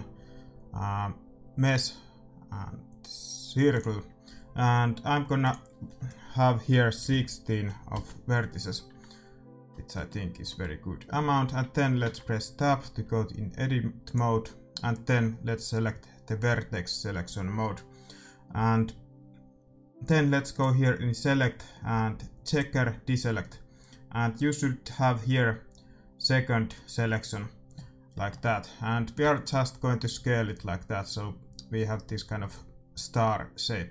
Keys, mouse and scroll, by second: 5.3-7.2 drag, 9.6-12.1 middle drag, 12.0 Tab, 14.0-15.7 drag, 14.7 middle click, 27.8 middle click, 28.1-29.1 scroll down 1, 29.1-29.7 scroll down 1, 29.1 s.